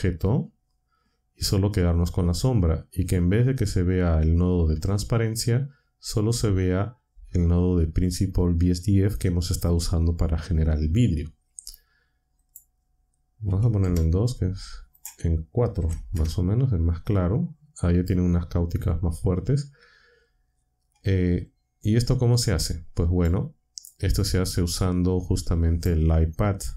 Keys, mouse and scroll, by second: 12.4 click, 13.2-13.9 typing, 14.9 click, 15.8-16.1 typing, 21.5-22.5 drag, 23.2 click, 24.7-26.0 drag.